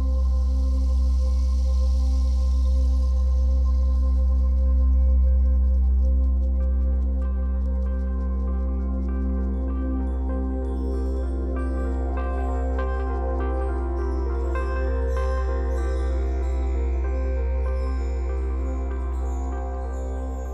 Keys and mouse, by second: 0.0 click, 1.4 ctrl+shift+click, 4.1 shift+click, 5.1 click, 6.1 click, 6.5 drag, 7.0 drag, 7.7 click, 8.5 ctrl+shift+click, 10.8-14.0 drag, 14.2 ctrl+shift+click, 17.9 Delete.